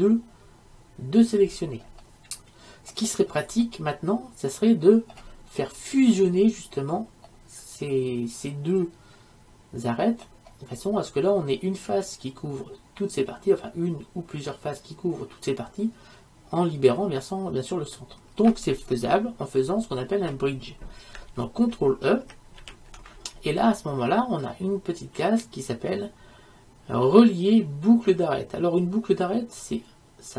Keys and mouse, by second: 1.4-9.6 middle drag, 10.0 middle click, 22.7 ctrl+e.